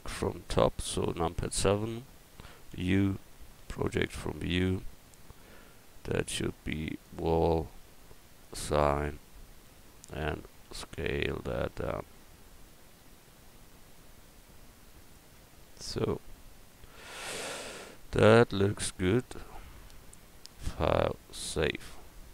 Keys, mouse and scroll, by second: 1.2 KP_7, 2.7 u, 7.0-9.3 drag, 9.3-10.6 middle drag, 10.6 s, 15.4 Tab, 20.5-22.3 drag.